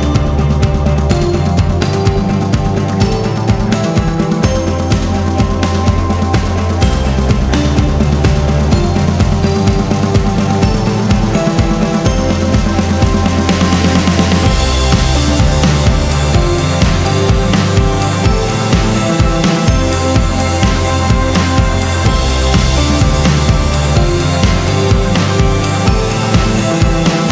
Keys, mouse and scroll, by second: 0.3 scroll down 1, 0.6 scroll up 1, 1.9 ctrl+o, 3.6 scroll up 1, 3.6 click, 4.9 click, 6.4 click, 7.1 F4, 8.7 F9, 10.6 click, 14.8 click, 16.9 ctrl+click, 19.2 F9, 22.9 click, 24.4 ctrl+click, 26.2 ctrl+click.